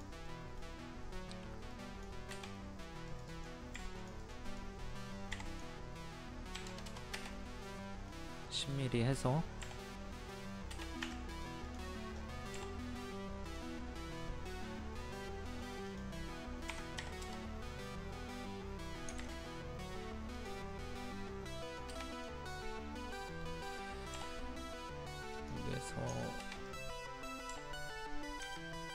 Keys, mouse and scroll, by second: 0.2 middle click, 1.7 click, 2.6 middle click, 3.1 click, 3.7 click, 6.5 KP_1, 7.7 middle click, 9.6 m, 10.8 space, 11.0 Escape, 11.3 click, 17.0 KP_2, 20.3 click, 24.1 m, 25.3 click, 26.6 click.